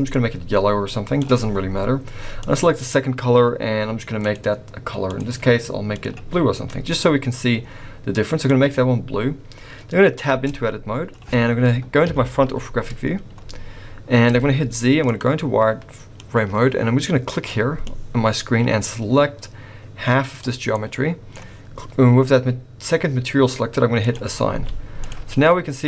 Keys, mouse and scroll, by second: 2.4 click, 4.2 click, 5.0 click, 5.9 click, 9.6-10.3 scroll up 1, 10.3 Tab, 12.0 KP_1, 14.3 z, 16.2 click, 17.8 click, 20.7 middle click, 24.0 click, 24.5 z.